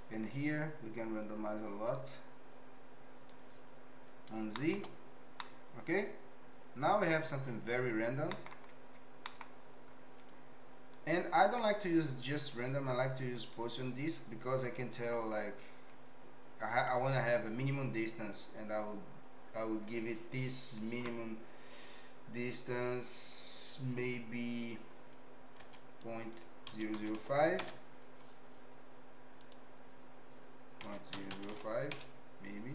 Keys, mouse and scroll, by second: 4.5 shift+middle click, 5.4-7.1 middle drag, 8.3 middle click, 9.2 middle click, 11.0 click, 12.7 click, 17.0-28.9 drag, 26.9 KP_0, 29.5-32.7 drag, 31.3 KP_0.